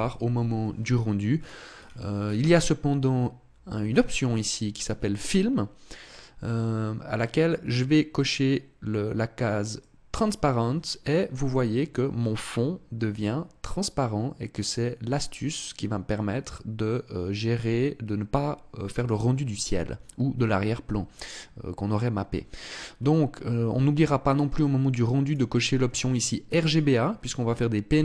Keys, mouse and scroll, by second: 1.0-3.5 scroll down 13, 3.5 scroll down 1, 9.4 click, 24.9 click, 26.3 click.